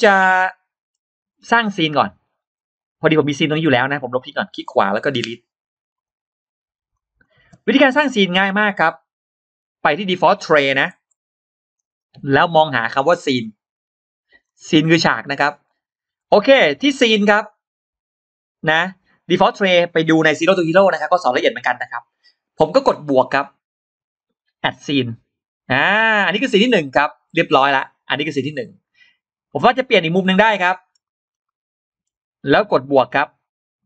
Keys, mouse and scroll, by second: 0.7-1.0 scroll up 2, 1.2 scroll down 2, 3.8 right click, 5.8 click, 6.8 click, 7.6-8.4 scroll down 2, 7.6 space, 7.9 middle click, 9.0-9.6 scroll up 2, 11.0 click, 11.8-14.1 drag, 14.3 shift+right click, 14.4 shift+right click, 15.4 click, 24.0 click, 29.3-30.7 middle drag, 30.7-31.0 scroll down 2, 30.9 middle click, 33.0 click.